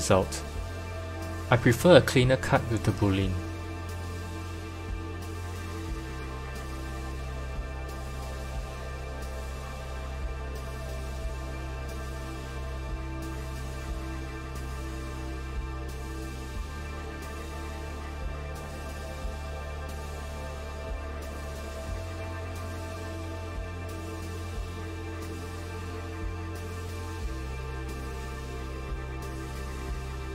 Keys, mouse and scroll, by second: 1.0 g, 4.3 KP_1, 5.0-5.6 scroll down 4, 5.6 g, 7.8 KP_7, 8.7-10.5 scroll up 4, 10.5 F2, 12.1 t, 14.0 s, 19.3 click, 20.5-23.0 drag, 24.8 click, 25.8 click, 26.5 click, 27.0-29.4 drag.